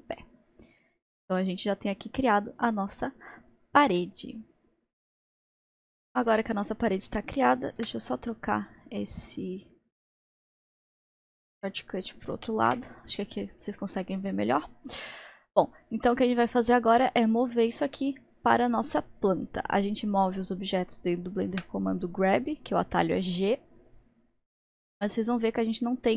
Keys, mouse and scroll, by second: 0.0-1.9 middle drag, 3.3 click, 4.0-5.1 middle drag, 6.3-7.9 middle drag, 7.9 n, 9.2-10.1 drag, 12.1 click, 12.7 n, 14.6-17.0 middle drag, 17.0 click, 17.6-21.6 middle drag, 21.6 g.